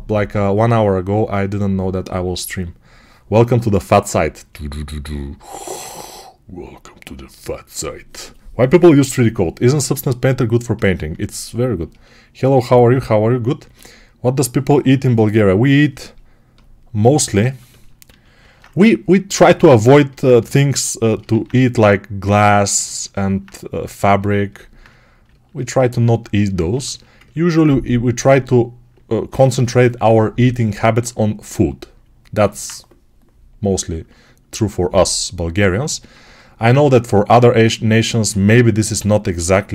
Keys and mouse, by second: 10.8-19.3 alt+shift+right drag, 17.9 q, 19.3 Escape, 19.3-21.1 middle drag, 20.3 g, 21.1-23.9 alt+drag, 21.2 alt+q, 23.9-39.7 ctrl+alt+right drag.